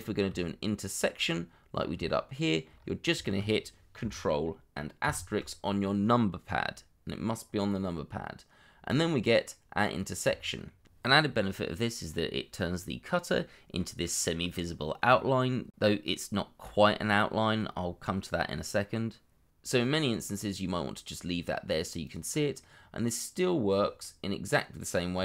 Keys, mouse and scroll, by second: 0.3 shift+middle click, 1.2-1.7 shift+scroll up 1, 1.7-2.7 scroll down 2, 2.7 scroll up 1, 3.2 shift+middle click, 9.5 middle click, 10.3 shift+middle click, 11.5 middle click, 11.8 scroll down 1, 12.1 shift+middle click, 17.0 middle click, 18.4 double click, 19.8 middle click, 22.0 double click, 22.6 middle click, 25.1 g.